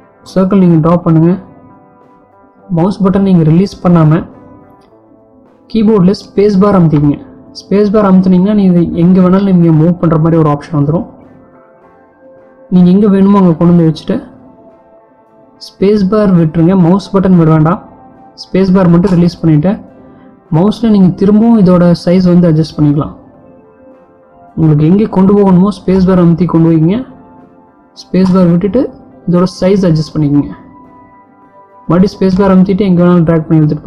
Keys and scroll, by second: 6.7 space.